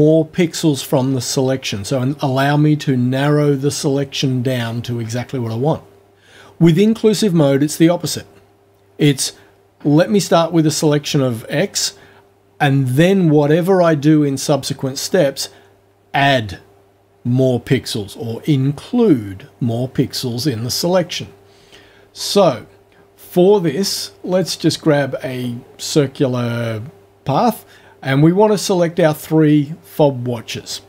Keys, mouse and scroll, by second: 24.4 click, 29.6 click.